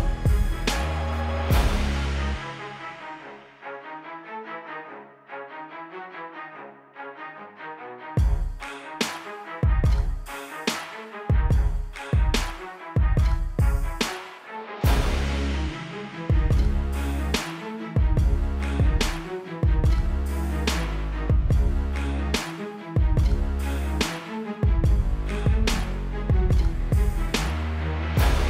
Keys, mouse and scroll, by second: 0.0 click, 1.5-2.0 typing, 2.1 click, 2.4 Up, 2.5 Right, 2.7 Left, 3.3 typing, 3.6 click, 4.1 click, 4.4 =, 4.7 space, 4.9 click, 5.7 shift+click, 6.2 v, 6.3 click, 7.8 v, 7.9 click, 8.1 Up, 8.5 space, 8.9 click, 9.8 click, 13.1 v, 14.0 click, 16.0 alt+click, 16.8 click, 17.3 Return, 17.6 Up, 18.3 click, 20.1 click, 22.2 click, 22.8 Return, 23.4 right click, 24.8 click, 26.0 ctrl+t, 26.4 alt+click, 27.9 Return, 28.2 Return.